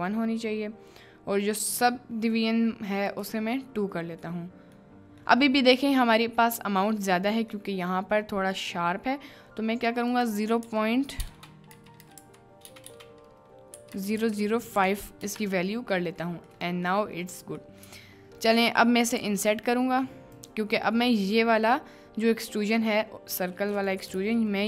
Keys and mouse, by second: 3.2 click, 4.3-4.8 middle drag, 5.3 middle click, 6.3 middle click, 7.5 middle click, 10.1-12.8 drag, 12.0 0, 12.8 BackSpace, 14.1 0, 16.0 middle click, 16.6-17.0 middle drag, 17.7 middle click, 17.9 Tab, 18.5 click, 20.3 click, 24.2 ctrl+z.